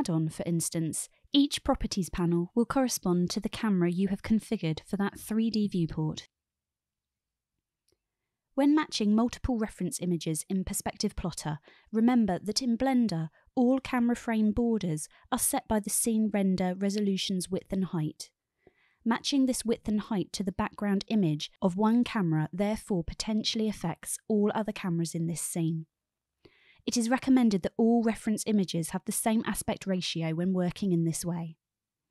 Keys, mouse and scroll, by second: 2.0 n, 2.6 n, 3.7-5.3 drag, 6.7 click, 7.2-8.2 drag, 8.9-9.7 drag, 11.8-12.7 drag, 15.2-16.1 drag, 18.0-18.8 drag, 20.5-21.7 drag, 24.2-24.7 drag, 27.3 click.